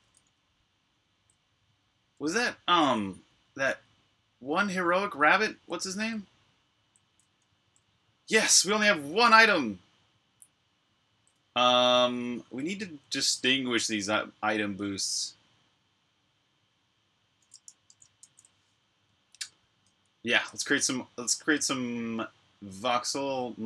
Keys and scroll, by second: 0.0-2.9 typing, 4.3-8.3 typing, 10.2-11.6 typing, 12.6-13.6 typing, 17.7 super+q.